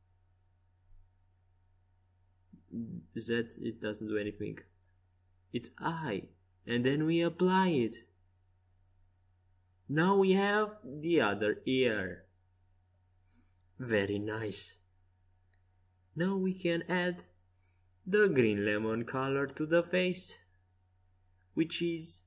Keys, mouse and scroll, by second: 3.0-7.9 drag, 10.0-11.8 drag, 11.3 right click, 11.8-13.2 right drag, 12.2-14.0 drag, 13.8 ctrl+z, 14.6-16.5 right drag, 16.9-18.8 drag, 19.2 right click, 20.0 z, 21.5-22.2 drag.